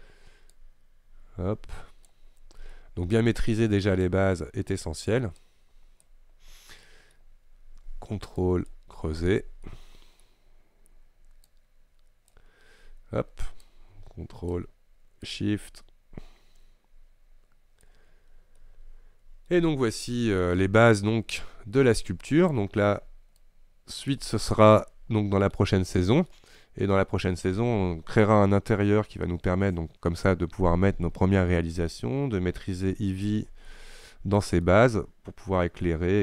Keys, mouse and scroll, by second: 2.4 scroll down 2, 2.5-2.8 scroll up 1, 2.8-4.1 middle drag, 4.1-6.6 drag, 6.6-6.9 scroll down 2, 6.9 middle click, 7.2-8.2 scroll up 1, 8.4-9.7 ctrl+drag, 9.7-11.6 middle drag, 11.6-18.2 drag, 18.2-18.7 scroll down 2, 18.7 middle click, 19.6 scroll up 1, 19.9-21.4 shift+middle drag, 21.4-24.9 shift+drag, 24.9-33.0 shift+middle drag, 33.0-33.8 scroll down 2, 33.8-36.2 shift+middle drag.